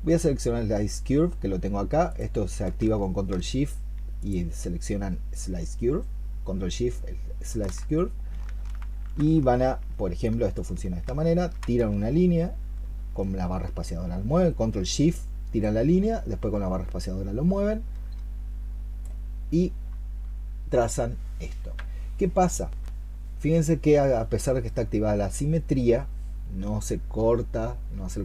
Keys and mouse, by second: 4.0 ctrl+shift+click, 10.4 ctrl+shift+click, 11.7 shift+space.